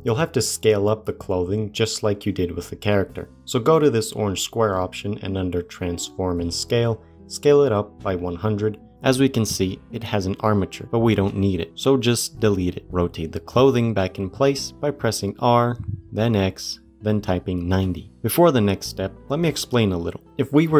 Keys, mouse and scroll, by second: 1.1 click, 4.3-6.5 drag, 6.5 KP_0, 8.7 scroll up 2, 8.9-10.9 middle drag, 10.9 click, 12.2 Delete, 12.8-13.5 shift+middle drag, 13.5 click, 14.8 r, 20.1 middle click, 20.2 g.